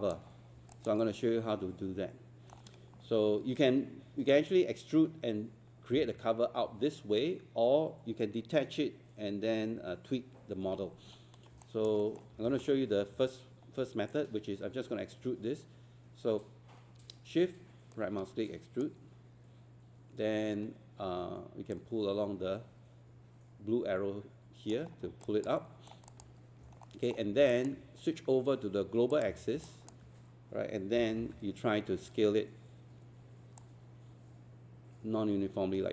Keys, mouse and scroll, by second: 0.3 scroll up 1, 0.8 alt+click, 1.0 alt+middle click, 11.6 alt+click, 16.8 scroll up 1, 18.0-19.7 shift+right drag, 21.8-24.9 drag, 24.9 scroll down 1, 25.2 alt+click, 25.6 alt+middle click, 26.1 alt+click, 26.4 scroll up 1, 26.8 alt+middle click, 27.5 alt+click, 29.7-30.7 alt+drag, 31.0 typing, 33.6-35.9 drag.